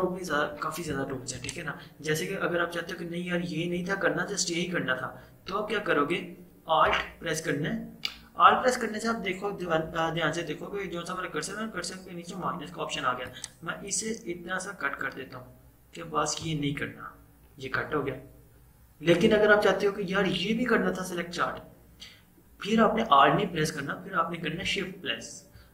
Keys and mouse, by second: 1.5 click, 6.9 click, 13.4-19.1 alt+drag.